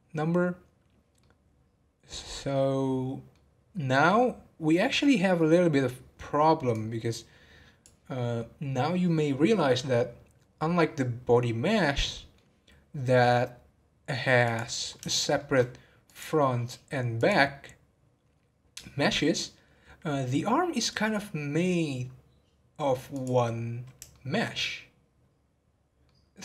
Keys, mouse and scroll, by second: 1.2-4.3 middle drag, 6.7-9.9 drag, 12.1 middle click, 13.0-14.4 scroll down 1, 14.4 click, 15.1-16.0 shift+middle drag, 16.0 click, 17.2 click, 23.1 click, 24.1-26.4 shift+middle drag.